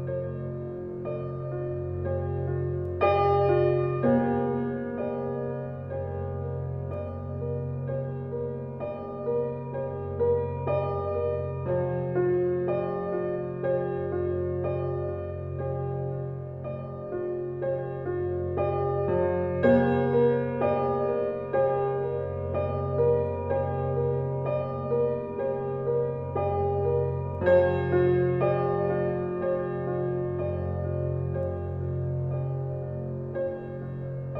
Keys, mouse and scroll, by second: 0.1 scroll down 1, 1.2 click, 1.4-1.9 scroll down 1, 1.9 scroll up 1, 2.6-3.8 scroll down 1, 3.6-4.5 typing, 5.1 right click, 6.1 click, 6.4 scroll down 1, 6.9 scroll up 1, 7.7 click, 8.0-9.4 scroll down 1, 9.4 scroll up 1, 10.4 click, 10.7 scroll down 1, 11.6 click, 11.9 scroll up 1, 12.6-13.0 scroll down 1, 13.0 scroll up 1, 13.6 scroll down 1, 14.6 click, 15.0-16.2 scroll up 1.